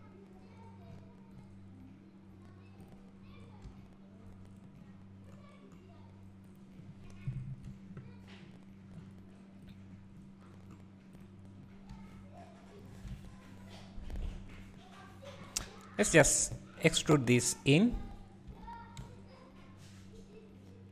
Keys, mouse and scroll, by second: 0.9 scroll up 1, 3.0 click, 3.8 g, 6.6 click, 7.6 KP_Decimal, 8.4 scroll up 1, 9.0 scroll down 1, 9.7 click, 10.2-10.6 scroll up 1, 10.6-11.2 scroll down 1, 11.2 click, 12.0 g, 13.2 alt+a, 14.0 scroll down 1, 14.8 scroll up 1, 16.2 alt+click, 16.6 `, 18.5 e.